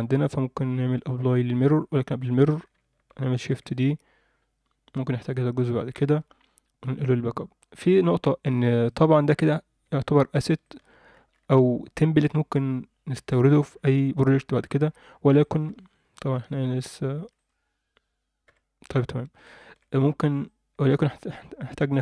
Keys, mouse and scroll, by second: 1.0-1.7 drag, 3.3 shift+d, 5.9 m, 8.8 click, 9.2-9.8 scroll up 1, 9.8 Tab, 10.6 alt+shift+middle click, 11.1 alt+a, 12.3 Tab, 14.9 Tab, 15.3 scroll down 1, 15.4 alt+shift+middle click, 15.7-16.3 scroll up 3, 16.3 alt+shift+middle click, 16.6 scroll up 2, 17.1 2, 17.4 click, 18.4 f, 19.1 Tab, 19.6 alt+shift+middle click, 19.9 ctrl+alt+middle drag, 20.4-21.8 ctrl+alt+middle drag.